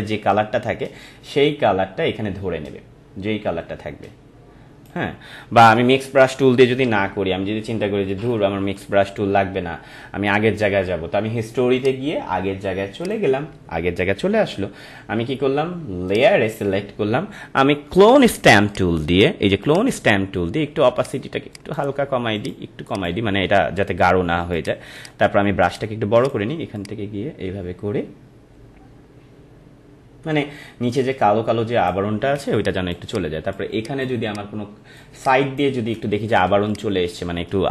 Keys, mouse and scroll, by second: 7.1 ctrl+alt+z, 11.8 click, 16.1 click, 18.7 right click, 19.6 click, 24.6 alt+click, 25.0 right click, 25.6 click, 26.2-32.3 alt+drag, 32.3-35.3 typing, 32.5 click, 33.1 click, 33.7 click, 34.2 click, 35.2 click, 36.7 click, 37.0-37.7 typing.